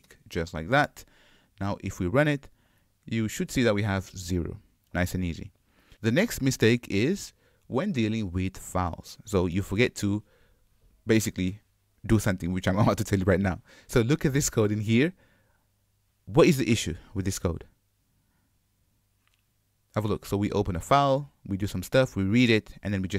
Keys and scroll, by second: 0.1 Return, 2.0 shift+F10.